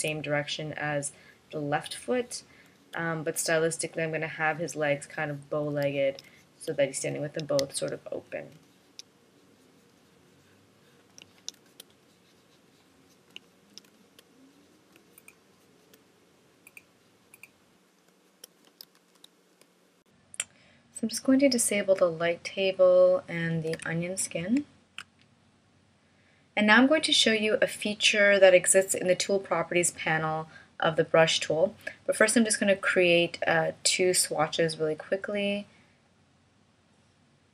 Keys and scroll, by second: 0.2 space, 3.1 space, 6.7 space, 12.0 space, 14.3 space, 15.4 space, 18.5 space, 19.8 shift+m, 24.4 alt+super+o.